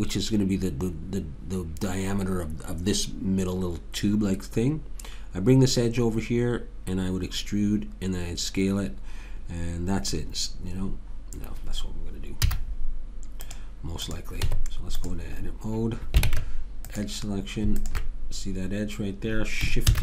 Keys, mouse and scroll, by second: 12.4 z, 14.1 click, 14.5 Tab, 16.3 ctrl+Tab, 19.9 shift+d.